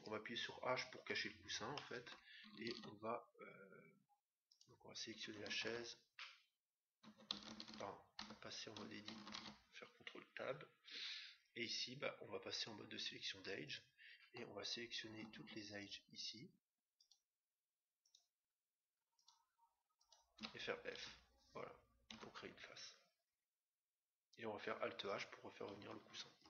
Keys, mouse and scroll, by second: 0.9 h, 1.7-3.4 middle drag, 2.7 ctrl+Tab, 4.5-6.2 right drag, 8.3 Tab, 9.2 ctrl+Tab, 13.6-15.2 right drag, 15.9-21.6 right drag, 21.0 f, 22.2 Tab, 22.9-24.8 middle drag, 26.3 alt+h.